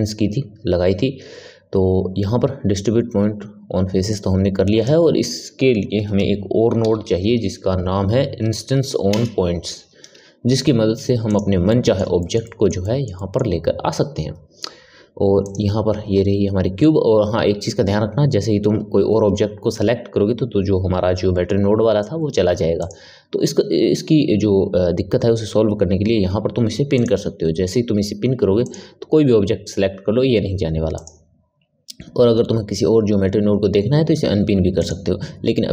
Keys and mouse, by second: 4.1 click, 11.6-15.4 middle drag, 15.4 click, 22.7 click, 26.9-28.7 drag, 30.9 click, 34.7 click.